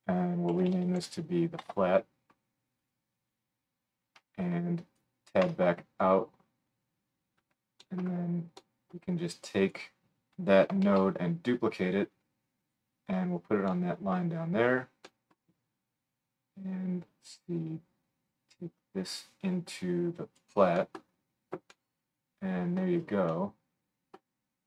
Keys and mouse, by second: 2.9-4.6 drag, 4.9 middle click, 5.4 Tab, 7.3-9.5 middle drag, 9.5-14.3 drag, 9.6 right click, 10.8 shift+d, 13.3 right click, 14.3 right click, 14.6 click, 15.1 right click, 15.3 click, 15.3 right click, 15.5-17.9 drag.